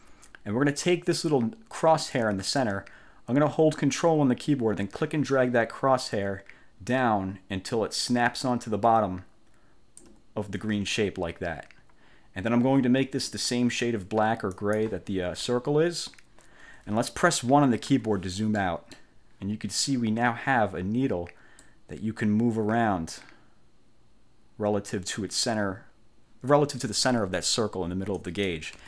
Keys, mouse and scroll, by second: 5.4-10.3 ctrl+drag, 14.7 click, 18.0 1, 18.7 click, 21.7-28.8 drag.